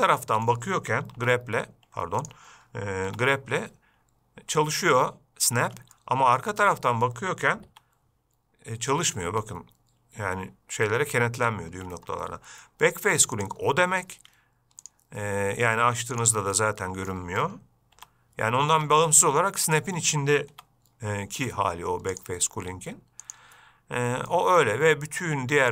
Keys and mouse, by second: 0.1 shift+middle click, 0.5 middle click, 1.4 g, 3.3 g, 6.2 middle click, 7.9 g, 13.6-14.2 drag, 14.4 Escape, 15.1-16.6 drag, 16.8 middle click, 18.2 g, 19.2-20.1 middle drag, 20.8 g, 22.5-23.8 drag, 24.6 shift+middle drag.